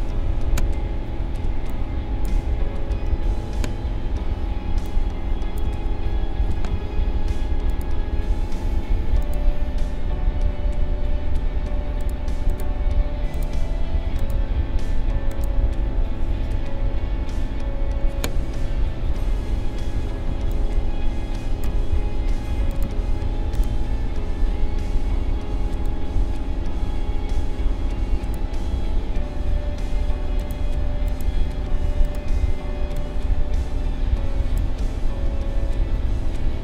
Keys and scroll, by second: 0.1 ctrl+=, 3.1 ctrl+-, 4.2 space, 18.9 ctrl+=, 20.0 space.